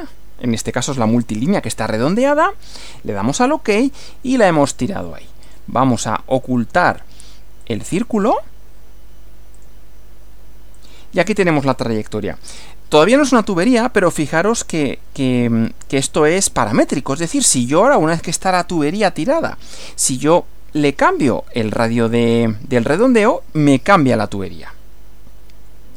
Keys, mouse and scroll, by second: 2.2 click, 4.5 scroll down 2, 5.5 click, 6.4 click, 7.6 click, 8.0 right click, 9.6 click, 10.8 click, 11.4 scroll up 1, 11.8 scroll down 1, 16.3 click, 20.0 click, 20.7 scroll up 1, 22.2 click.